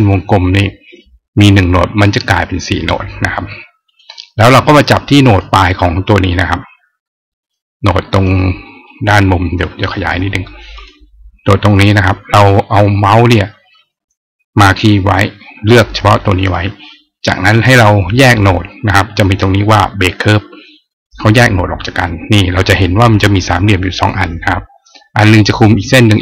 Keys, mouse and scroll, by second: 3.6 click, 5.0 click, 8.0 click, 8.7 click, 10.6 click, 11.9 click, 20.7 click.